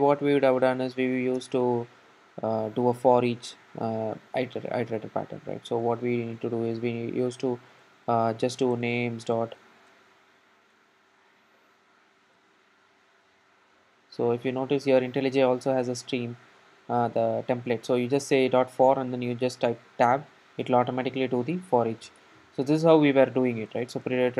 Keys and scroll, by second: 0.9 super+c, 2.9 super+v, 6.1 ctrl+shift+super+Up, 19.9 Tab, 22.3 Tab.